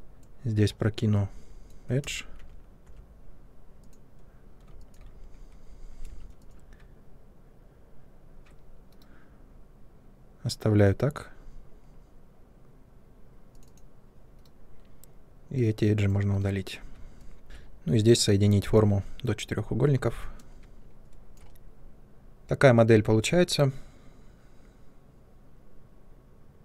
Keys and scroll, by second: 2.0 space, 2.3 Tab, 2.8 Tab, 6.0 2, 8.8 Delete, 14.3 Delete, 16.3 Delete, 17.4 c, 22.2 ctrl+1.